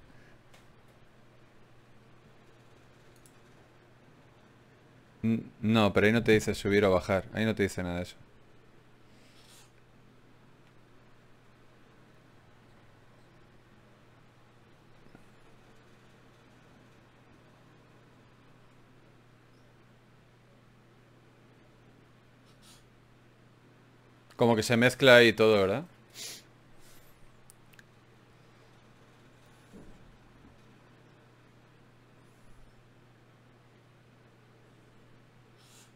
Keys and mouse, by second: 14.3-17.0 middle drag, 18.4-20.8 middle drag, 29.3 middle click, 31.0-32.1 middle drag.